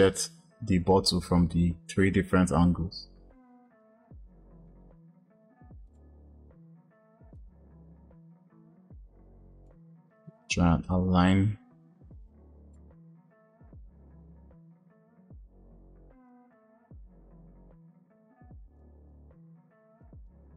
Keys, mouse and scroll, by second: 5.8-7.5 drag, 13.2 click, 16.6 g, 20.0 click.